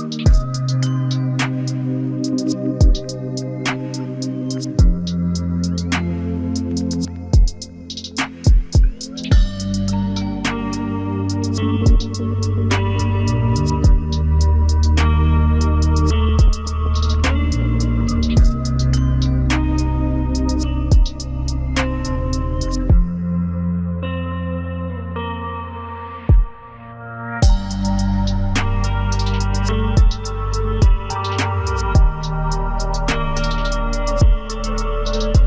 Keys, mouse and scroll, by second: 1.6 double click, 2.3 w, 3.3-4.2 scroll down 1, 4.2 scroll down 1, 4.5 ctrl+alt+click, 5.4 ctrl+alt+click, 6.2-6.7 ctrl+alt+scroll down 3, 6.7 z, 8.1 ctrl+space, 8.4 ctrl+click, 12.6 ctrl+alt+right click, 17.5 z, 18.9 ctrl+space, 19.5 double click, 22.8 Up, 23.7 Up, 23.8 Up, 24.0 Up, 29.0 Down, 29.2 Down, 29.4 Down, 32.8 double click.